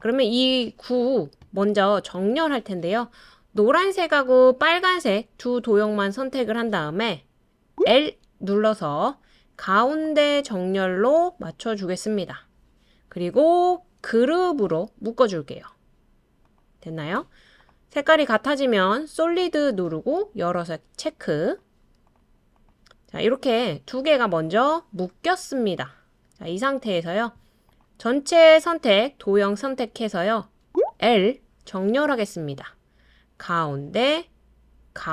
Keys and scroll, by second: 31.0 typing.